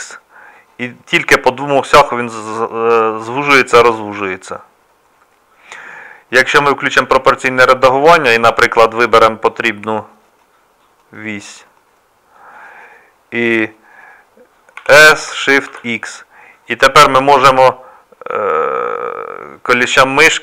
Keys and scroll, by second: 14.8 s.